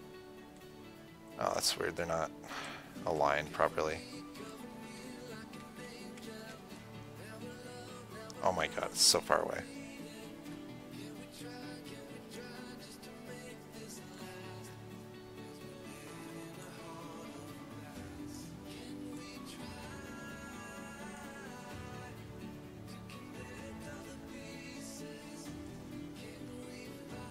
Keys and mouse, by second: 2.9 KP_4, 2.9 KP_7, 3.5 KP_7, 4.7 KP_4, 5.5 KP_6, 5.9 KP_1, 6.7 KP_7, 10.6-14.7 drag, 16.9-21.9 drag, 21.9-23.7 middle drag, 26.6 KP_7.